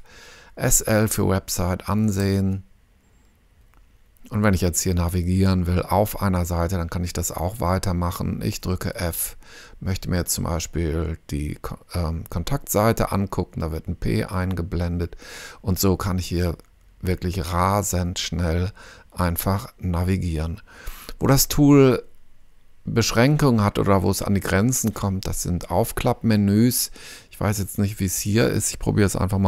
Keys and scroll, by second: 1.8 s, 2.2 l, 8.9 f, 14.2 p.